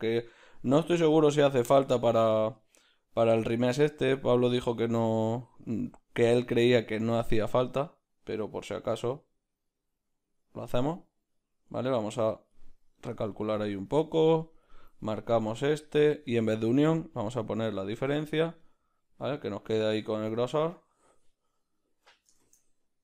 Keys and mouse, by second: 3.7-15.8 drag, 18.5 click, 18.6-20.5 middle drag, 20.5-22.1 right drag, 22.1 s.